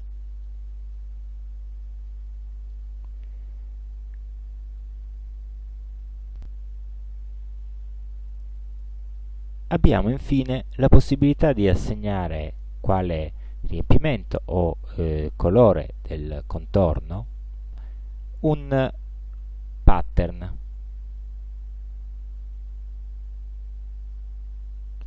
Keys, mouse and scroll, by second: 0.5 click, 1.3 ctrl+scroll down 2, 2.3 ctrl+click, 9.2 click, 19.9 click, 25.0 click.